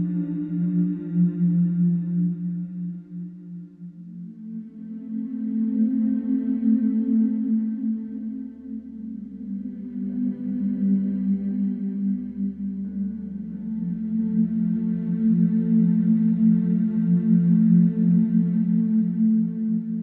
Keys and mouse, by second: 3.0-8.7 drag, 11.4-15.5 drag, 17.3-19.5 alt+drag, 19.8-20.0 drag.